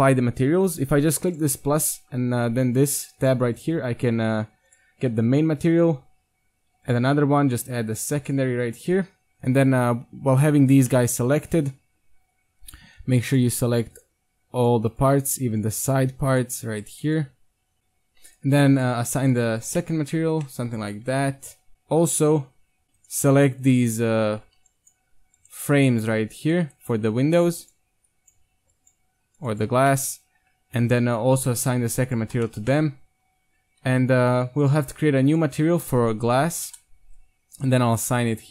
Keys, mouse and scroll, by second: 1.3-2.3 drag, 5.4 Tab, 6.1 Tab, 6.9-10.9 drag, 10.9 middle click, 12.7-17.8 right drag, 17.8-18.8 middle drag, 19.2-19.7 drag, 19.7 Tab, 19.8-20.1 drag, 20.9 Tab, 21.2 KP_1, 21.5 Tab, 21.7 Tab, 22.8-24.1 right drag, 24.3 z, 24.6 c, 29.7 z, 29.9 middle click, 31.4-33.3 drag, 32.4 Tab, 33.1 KP_1, 33.5 Tab, 34.6 click, 36.5 click, 36.6 s, 37.5 right click.